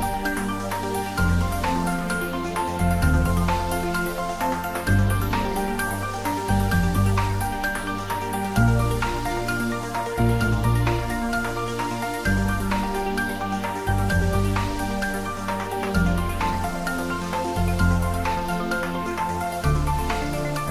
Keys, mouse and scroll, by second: 0.6 click, 3.3 click, 9.6 click, 14.8 click, 19.7 click.